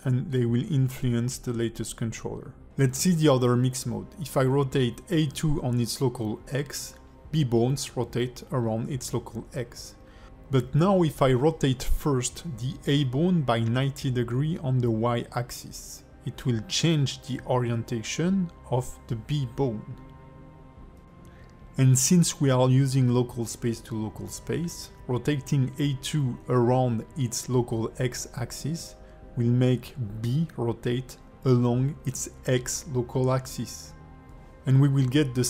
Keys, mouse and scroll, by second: 0.4 middle click, 1.3 click, 2.2 ctrl+s, 4.1 click, 4.6 r, 7.9 click, 8.8 r, 14.0 click, 14.5 alt+middle click, 16.0 click, 17.7 click, 25.0 click, 25.7 r, 33.4 click.